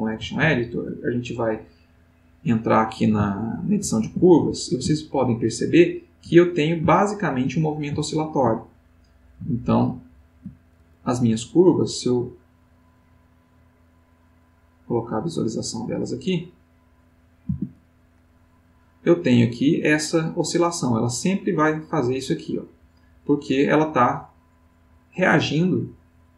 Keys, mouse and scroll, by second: 0.4 ctrl+Tab, 1.1 ctrl+middle click, 3.3 ctrl+middle click, 4.1 ctrl+a, 4.5-6.3 ctrl+middle drag, 8.0 ctrl+middle click, 8.6 ctrl+middle click, 9.2 ctrl+middle click, 14.2 click, 14.6 click, 16.2 click, 16.7 click, 17.4 a, 18.2 middle click, 23.9-26.3 drag.